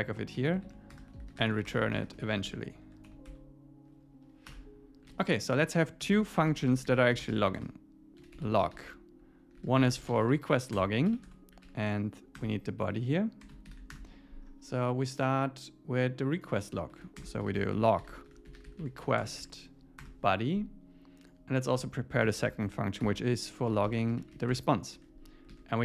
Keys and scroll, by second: 0.3 Down, 0.7 super+Right, 0.9 Return, 2.9 ⟲, 4.5 Return, 5.1 super+s, 6.1 Return, 10.7 Return, 12.4 Return, 12.8 Right, 13.7 alt+8, 13.9 Return, 16.9 super+Right, 17.2 Return, 20.0 Return, 21.7 Return, 24.9 Escape, 25.5 super+s.